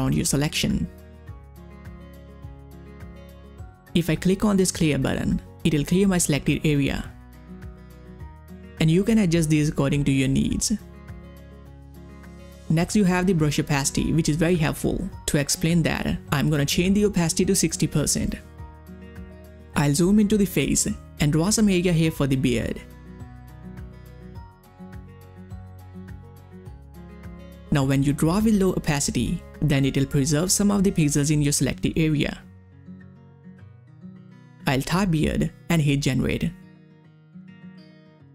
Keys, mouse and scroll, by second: 0.8-1.1 ctrl+scroll up 1, 1.7 click, 1.9-2.4 ctrl+scroll down 1, 3.1-3.6 ctrl+scroll up 1, 7.3 ctrl+scroll up 1, 7.3-14.0 drag, 14.8 click, 14.8-19.3 drag, 19.3 ctrl+scroll up 1, 21.5 click, 21.9 space, 22.0 click, 22.2 space, 24.4-25.9 drag, 34.7 click, 34.7-36.0 typing, 37.0 click.